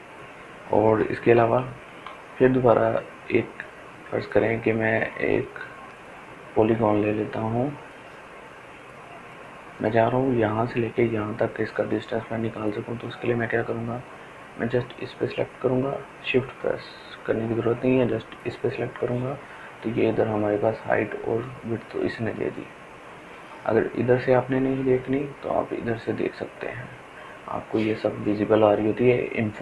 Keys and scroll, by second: 0.1 ctrl+z, 1.5 ctrl+alt+z.